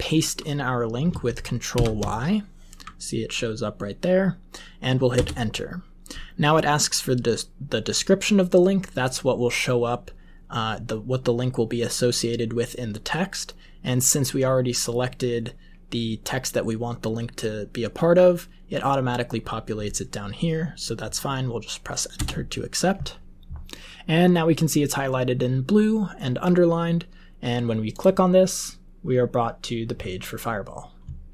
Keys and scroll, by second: 1.6 ctrl+y, 5.1 Return, 22.1 Return.